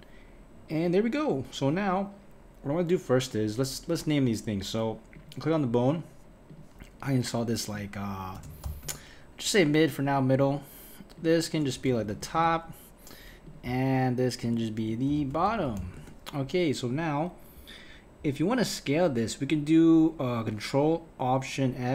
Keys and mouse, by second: 5.1 click, 6.5-10.1 drag, 11.2-13.5 drag, 14.5-15.6 drag, 15.6 t.